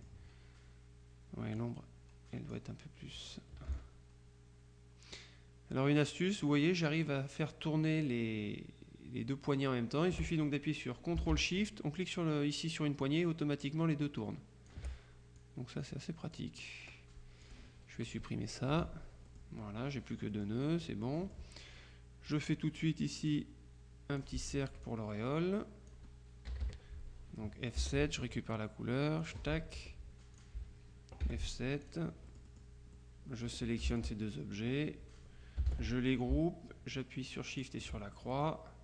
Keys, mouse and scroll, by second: 1.7-3.1 drag, 3.8-10.7 ctrl+shift+drag, 13.1-15.3 ctrl+shift+drag, 15.5-16.9 drag, 17.5 click, 18.8 Delete, 19.3-21.0 drag, 22.4 click, 23.4-24.8 drag, 24.6 F1, 24.9-26.5 drag, 26.6 KP_Subtract, 27.5 click, 27.9 F7, 29.3 click, 29.8 F2, 30.4 click, 31.3 F7, 31.9-33.1 drag, 33.5 F2, 34.0 shift+click, 35.8 ctrl+g.